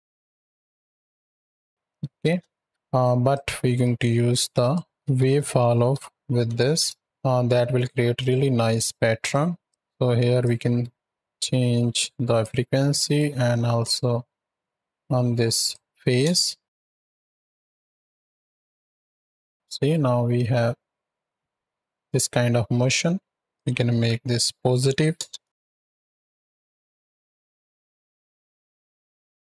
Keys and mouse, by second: 1.9 space, 2.6 shift+Left, 3.1 click, 4.4 click, 8.0 click, 9.1 click, 9.7 shift+Left, 10.3-12.3 drag, 12.8-15.6 drag, 16.6 shift+Right, 16.8 shift+Left, 17.1 space, 23.3 space, 23.4-25.1 drag, 25.5 shift+Right, 25.6 shift+Left, 26.0 space.